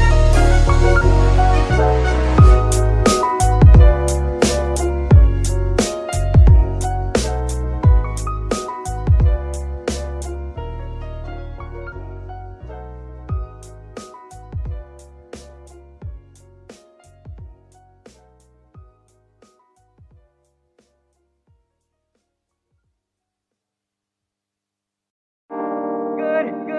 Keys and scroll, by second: 11.0 ctrl+Tab, 22.4 g.